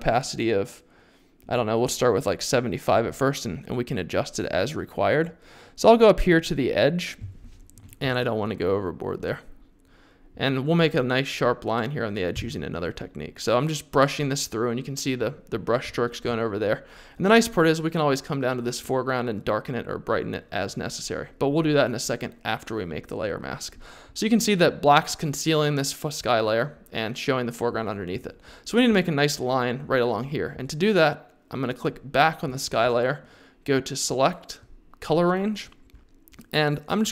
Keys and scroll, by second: 8.0 x, 12.3 x.